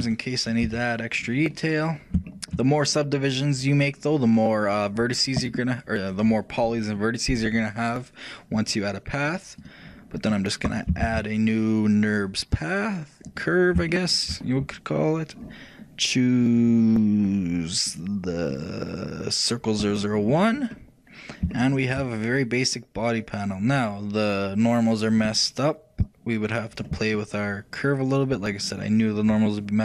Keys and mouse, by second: 0.8 a, 2.4-4.2 shift+middle drag, 9.4-11.0 drag, 11.2 shift+a, 14.0 middle click, 16.5-20.3 shift+drag, 20.6-24.1 middle drag, 26.1-28.0 drag, 27.3-29.2 middle drag.